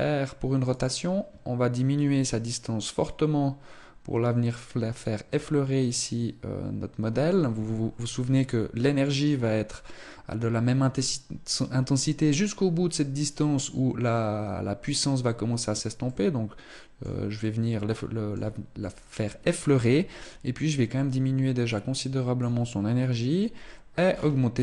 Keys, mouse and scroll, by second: 1.7 click, 15.8 middle click, 17.1 middle click, 19.9 click, 23.8-24.6 scroll down 5.